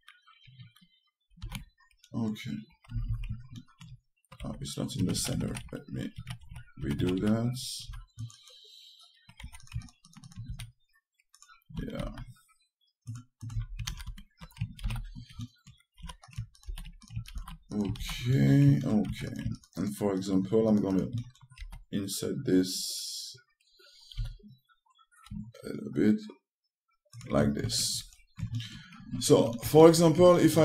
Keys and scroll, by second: 2.1 ctrl+a, 3.8 space, 5.1 2, 10.1 1, 12.5 a, 14.2 space, 16.7 3, 19.8 1.